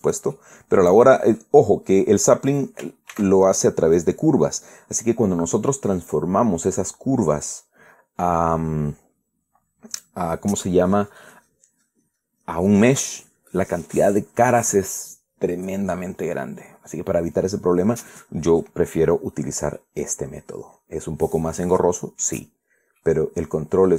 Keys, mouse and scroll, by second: 0.7 click, 1.0-2.8 middle drag, 3.2 right click, 3.8 ctrl+a, 4.7 click, 5.1-5.4 scroll down 1, 5.4-8.4 middle drag, 8.4 scroll down 1, 8.5 scroll up 1, 8.8-9.6 scroll down 1, 9.6 scroll down 1, 17.3-19.4 middle drag, 19.8 scroll up 1, 20.2 scroll down 2, 20.5-23.1 middle drag, 23.3-23.7 scroll down 2, 23.7-23.9 middle drag.